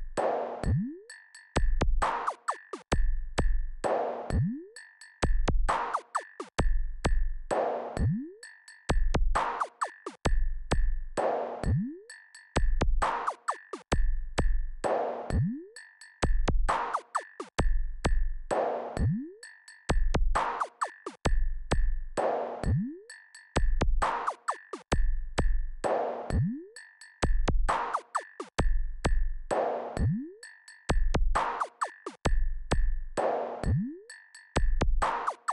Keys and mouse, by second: 5.8-11.4 drag, 14.6 KP_1, 19.2-24.0 drag, 30.2 KP_4, 30.4 KP_4.